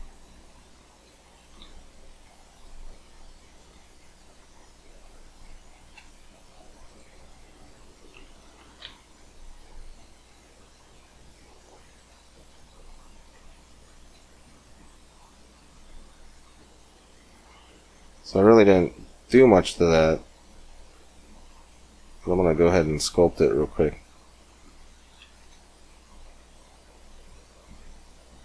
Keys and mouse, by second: 0.5 click, 1.5 ctrl+r, 7.2 middle click, 8.7 ctrl+r, 14.3-16.3 middle drag, 16.3 Tab, 21.1 middle click, 22.9-24.9 drag, 24.9 middle click, 25.3-27.2 drag.